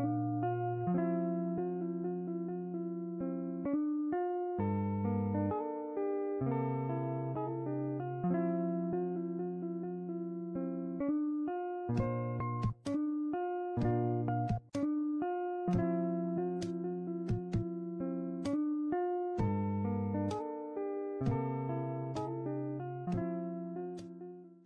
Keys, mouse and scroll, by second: 0.3 click, 0.8 scroll up 2, 1.0 shift+middle click, 1.2 click, 2.0 click, 2.3 middle click, 2.7 scroll up 4, 2.8 middle click, 2.9 click, 4.4 click, 4.5 click, 5.1 click, 5.5 click, 5.7-6.9 middle drag, 6.9 scroll up 1, 7.0-8.4 middle drag, 9.7-12.0 middle drag, 12.0 click, 13.4-15.3 drag, 16.1-17.7 drag, 18.7-19.5 middle drag, 19.5 scroll down 1, 19.8-22.2 middle drag, 22.2-22.6 scroll up 6, 22.6 scroll down 1, 22.7-23.6 middle drag, 23.6 scroll down 1, 23.8-24.5 middle drag, 24.5 scroll down 1.